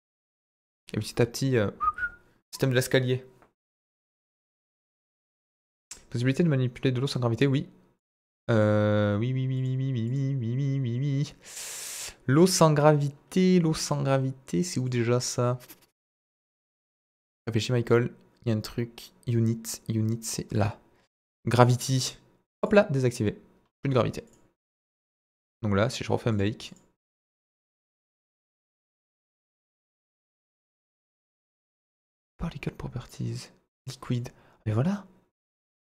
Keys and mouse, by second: 7.9 click, 8.5 click, 9.5 click, 10.1 click, 22.5 click, 26.3 click, 26.6 click, 33.0 click, 34.1 click.